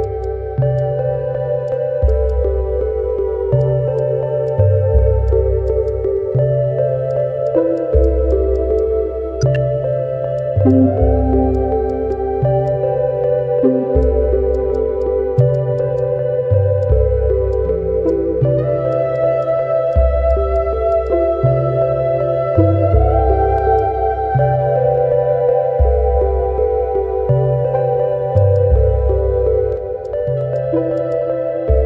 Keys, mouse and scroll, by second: 0.2 alt+click, 0.6 alt+middle click, 0.7 alt+click, 1.2 middle click, 1.3 Tab, 1.7 alt+click, 1.8 alt+middle click, 2.7 scroll up 1, 2.8 Tab, 3.0 scroll down 1, 3.1 Tab, 3.6 alt+click, 4.5 alt+click, 4.9 middle click, 5.0 Tab, 5.9 alt+click, 6.6 Tab, 6.7 middle click, 6.7 Tab, 7.1 alt+click, 8.8 alt+click, 9.7 Tab, 12.7 shift+click, 14.0 alt+click, 14.3 alt+middle click, 14.5 shift+click, 15.0 shift+click, 15.4 shift+click, 15.8 shift+click, 16.6 alt+middle click, 16.8 alt+click, 17.0 alt+scroll up 1, 17.1 alt+middle click, 17.5 alt+click, 18.1 shift+click, 18.9 ctrl+click, 19.4 shift+click, 20.7 scroll down 1, 21.0 shift+click, 23.6 scroll down 1, 25.5 ctrl+s, 28.3 alt+click, 28.5 alt+click, 30.0 ctrl+click, 30.5 ctrl+click, 30.9 ctrl+click.